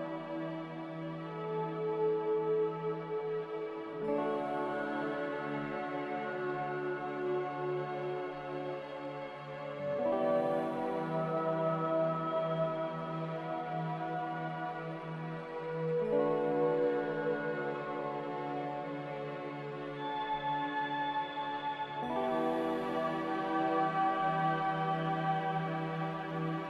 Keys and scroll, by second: 1.7 ctrl+z, 4.7-5.5 typing, 18.5 z, 19.8 ctrl+z, 23.1 ctrl+z, 23.6 ctrl+z.